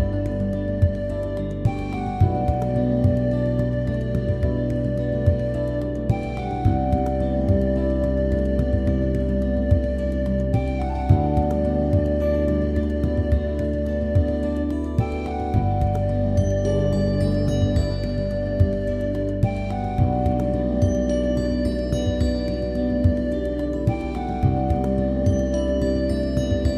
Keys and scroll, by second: 12.6-14.9 typing, 16.7 super+a.